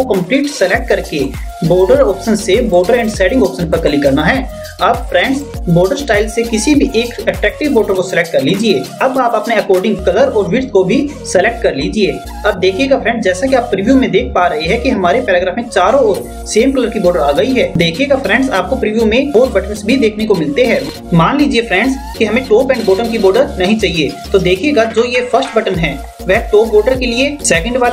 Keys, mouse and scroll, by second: 0.6 click, 11.6 click.